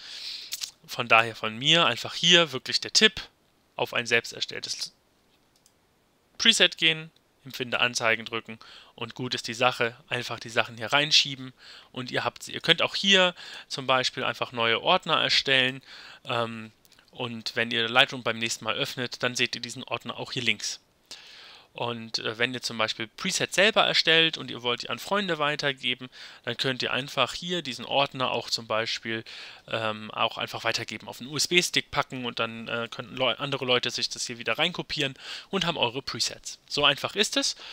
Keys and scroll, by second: 17.4 Return.